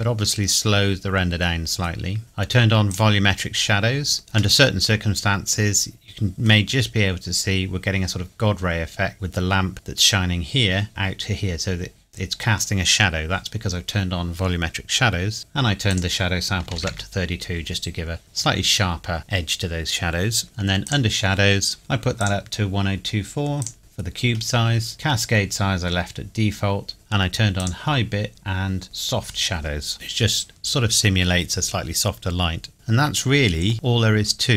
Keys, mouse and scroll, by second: 2.9 click, 4.2-4.6 scroll down 1, 4.6 middle click, 6.8 scroll up 1, 9.1 middle click, 10.9-12.0 scroll up 2, 15.9 click, 16.6 KP_3, 16.8 KP_2, 16.9 KP_Enter, 20.4 scroll down 1, 20.8 click, 25.5 scroll down 1, 27.6 click, 32.7 middle click, 33.7-34.2 scroll up 1, 34.2 scroll down 1.